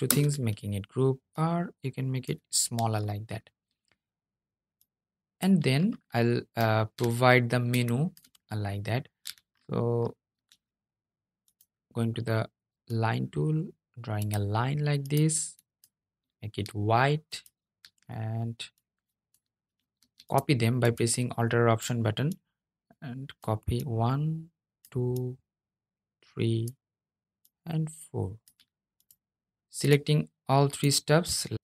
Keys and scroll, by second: 19.1 super+z.